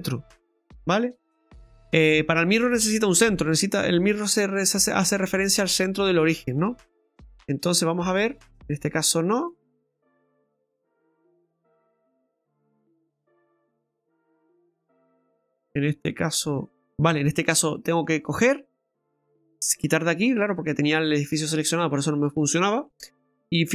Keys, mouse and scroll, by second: 0.2 typing, 0.6 middle click, 1.4 middle click, 7.0 click, 7.8 click, 8.3 click, 8.9 click, 9.4 click, 10.3 click, 11.4 click, 12.4 click, 16.2 middle click, 16.7 click, 17.1 ctrl+z, 17.7 middle click, 19.4 click, 20.2 middle click, 22.9 middle click.